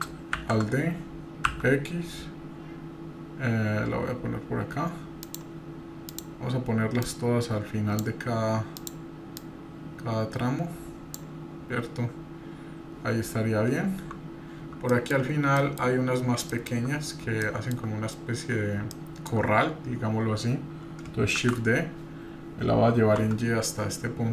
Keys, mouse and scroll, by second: 0.6 alt+d, 6.1 click, 7.0-8.0 drag, 8.7 click, 9.4 click, 13.7-14.1 scroll down 1, 14.9 middle click, 15.5-15.9 middle drag, 15.5-15.9 scroll down 2, 15.9-16.3 scroll up 1, 16.5 shift+middle click, 17.4 shift+middle click, 17.7-18.1 shift+scroll down 3, 18.9-19.3 shift+middle drag, 21.4 shift+d.